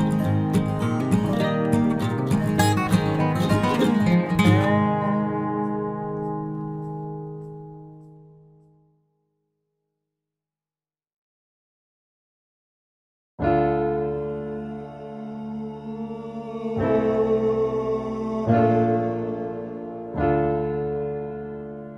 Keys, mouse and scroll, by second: 1.3 c, 7.0-10.5 drag, 8.9 c, 13.4-14.8 middle drag, 14.8 right click, 15.1-16.9 middle drag, 15.5 c, 19.3 middle click, 21.1 middle click, 21.4 middle click.